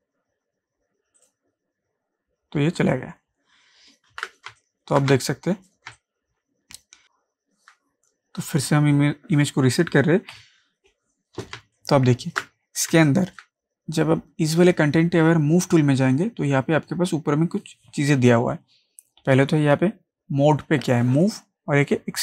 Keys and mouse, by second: 1.2 click, 4.1 ctrl+d, 4.5 ctrl+space, 4.6 ctrl+click, 5.1 space, 5.2 click, 5.6 space, 5.9 click, 6.0 ctrl+click, 6.4 ctrl+space, 11.4 F12, 11.6 ctrl+space, 11.8 ctrl+click, 12.4 ctrl+space, 12.9 ctrl+space, 13.1 ctrl+click, 21.2 click.